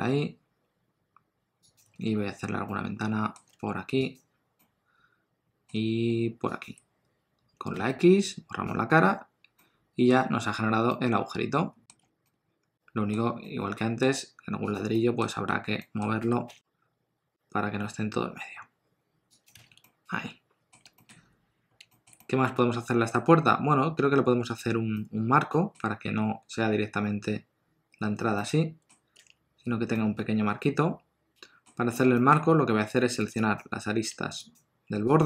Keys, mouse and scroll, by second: 2.6 middle click, 3.5 3, 4.1 click, 4.6 middle click, 6.8 shift+click, 7.8 x, 12.0 Tab, 12.2 middle click, 13.2 scroll down 1, 13.4 middle click, 14.7 click, 14.9 middle click, 16.2 r, 19.6 alt+a, 19.8 middle click, 21.0 shift+middle click, 21.2-21.8 scroll up 2, 21.9 shift+middle click, 22.2 middle click, 24.4 click, 24.9 middle click, 28.4 middle click, 29.2 Tab, 29.9 middle click, 31.7-32.0 scroll up 1, 32.1 shift+middle click, 32.4-32.9 scroll up 1, 32.9 scroll up 1, 33.3 click, 34.5 shift+click.